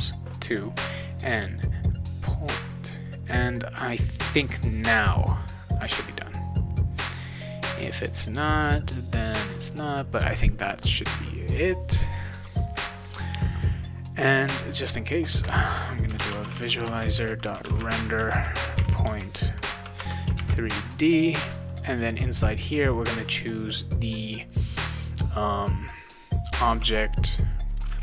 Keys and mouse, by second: 14.7 click, 15.3 Return, 15.8-20.3 typing, 20.0 Return, 26.7-28.0 typing.